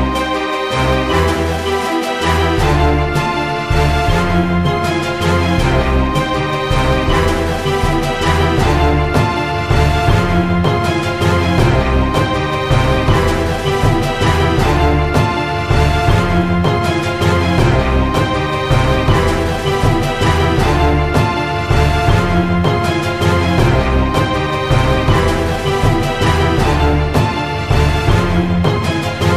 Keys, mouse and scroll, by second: 0.0 click, 1.6 middle click, 2.1 click, 3.5 ctrl+alt+click, 7.9 KP_1, 8.5 click, 8.9 middle click, 10.0 click, 10.5 s, 11.6 s, 12.6 middle click, 13.1 click, 14.0 middle click, 14.4 KP_1, 14.8 r, 15.8 click, 16.3 middle click, 16.5 Tab, 17.4 click, 17.6 ctrl+b, 19.0-20.0 middle drag, 20.0 a, 20.2 a, 20.5 click, 21.8 middle click, 22.4 KP_1, 23.5 Tab, 23.8 Tab, 24.6 middle click, 25.0 click, 26.8 a, 27.0 a, 27.1 middle click, 27.8 Tab, 28.1 click, 28.6 Tab, 28.8 Tab.